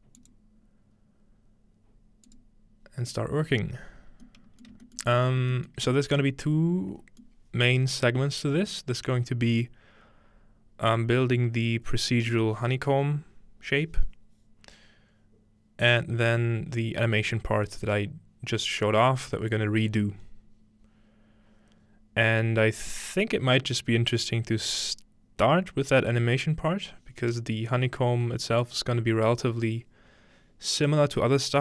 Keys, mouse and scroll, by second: 0.2 click, 2.3 click, 4.7 shift+middle click, 5.5 shift+middle click, 5.8-13.0 shift+middle drag, 5.9-13.0 scroll up 1.